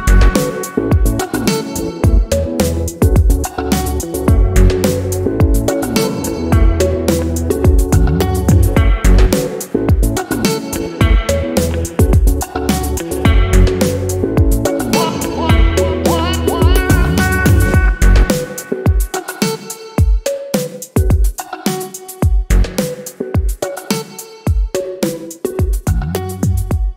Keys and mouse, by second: 1.7 drag, 2.2 click, 2.9 shift+middle click, 4.1-5.0 drag, 6.5 click, 7.6 shift+middle click, 7.9-9.8 shift+middle drag, 9.8 click, 10.6 ctrl+v, 10.6 g, 11.9 click, 13.5-15.0 drag, 15.0 g, 16.2 click, 16.6 click, 17.3 click, 17.7 click, 18.7 drag, 20.1 click, 22.1 click, 22.9 g, 23.2 click, 23.5-23.8 drag, 25.8 click, 26.7 right click.